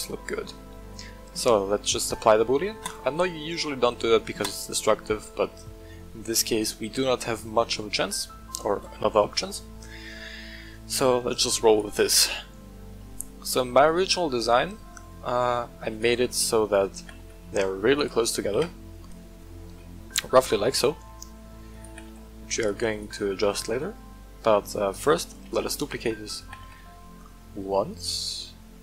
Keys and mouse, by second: 3.0-4.6 drag, 5.5-7.5 middle drag, 11.6 right click, 14.6-15.1 middle drag, 15.9 right click, 16.2 shift+click, 16.9 g, 17.1 z, 17.9 click, 18.5 KP_1, 19.8 shift+middle drag, 20.9 shift+middle drag, 21.7 click, 21.8 g, 22.0 z, 22.6-23.0 drag, 24.8 shift+middle click, 25.4 shift+d, 25.9 click, 26.4 g, 26.6 z.